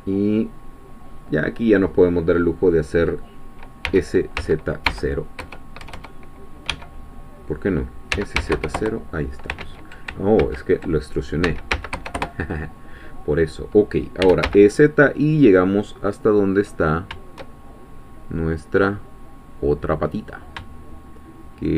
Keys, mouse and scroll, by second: 3.8 e, 4.4 z, 4.9 0, 6.7 Escape, 8.1 s, 8.4 z, 8.5 0, 8.8 Return, 9.6 ctrl+z, 11.4 s, 11.7 z, 11.9 0, 12.2 Return, 14.2 e, 14.4 z.